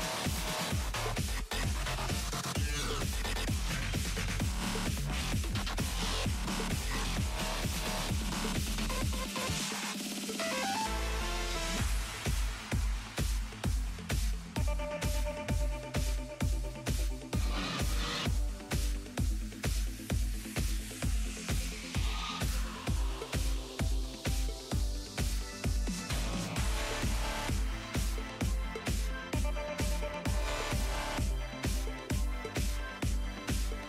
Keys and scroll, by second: 17.5 s.